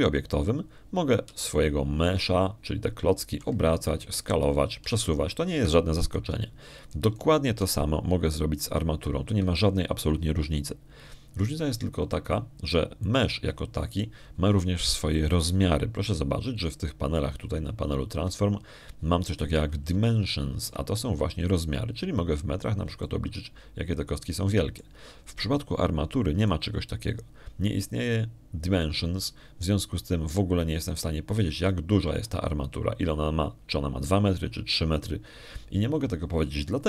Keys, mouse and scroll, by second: 0.6 shift+right click, 3.1 r, 5.9 s, 6.7 g, 7.4 Escape, 8.9 right click, 9.5 g, 11.1 Escape, 14.9 right click, 21.9 ctrl+click, 23.3 ctrl+click, 24.9 ctrl+middle click, 25.3-26.4 ctrl+drag, 26.4 ctrl+middle click, 28.3 right click, 32.7 click, 33.5 click.